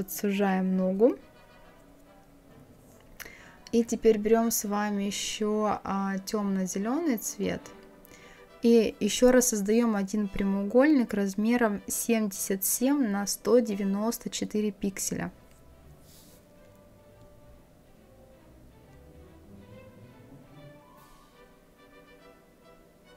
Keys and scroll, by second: 11.6 KP_7, 15.8 KP_1.